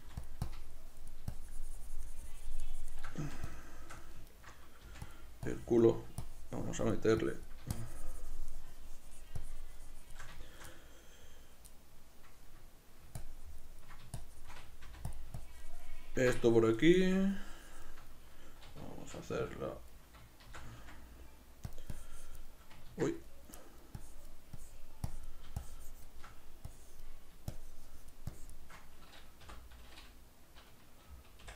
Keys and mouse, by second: 0.1 f, 0.6-3.6 drag, 3.2 f, 3.7-5.2 shift+middle drag, 4.9 f, 5.5-10.5 drag, 10.5-13.2 shift+middle drag, 13.2-15.2 ctrl+drag, 14.9 f, 15.5-18.4 ctrl+drag, 18.4-21.8 middle drag, 19.1 shift+v, 19.4 g, 20.5 shift+c, 22.0-23.7 drag, 23.3 ctrl+z, 23.7 middle click, 24.1-31.5 drag, 29.5 p.